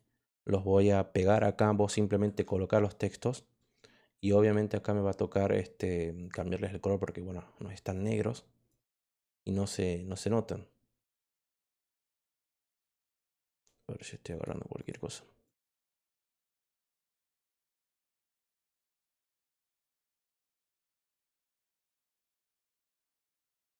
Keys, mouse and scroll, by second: 1.3 click, 2.2 ctrl+v, 6.1 click, 7.9 click, 8.6 click, 13.4 click, 14.2 click, 14.7 click, 15.4 click, 16.4 click, 20.5 click, 22.6 click.